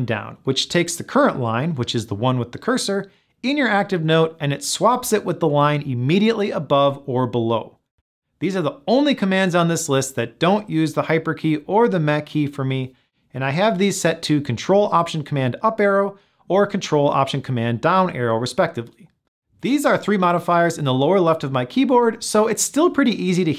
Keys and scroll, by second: 4.2 ctrl+alt+super+Up, 6.3 ctrl+alt+super+Down.